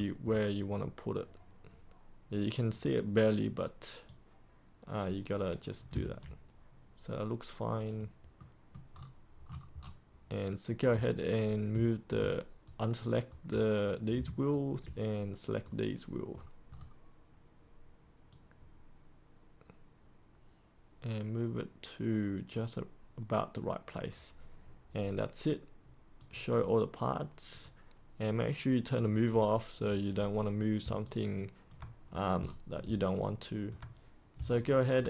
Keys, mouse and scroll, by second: 2.6-5.8 drag, 5.9 ctrl+z, 7.8 click, 8.3 middle click, 8.9-9.4 scroll up 1, 9.4-11.6 scroll down 1, 12.6 ctrl+right click, 14.4-16.3 ctrl+right drag, 16.3-18.2 scroll up 1, 18.2-30.7 drag, 30.9 alt+click, 32.0-32.7 scroll down 1, 32.8 alt+click, 34.5 alt+click.